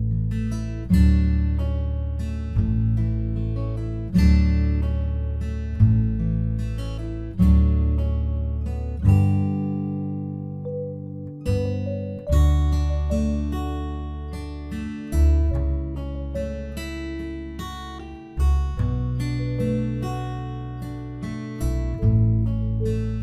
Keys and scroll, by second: 13.8 ctrl+t.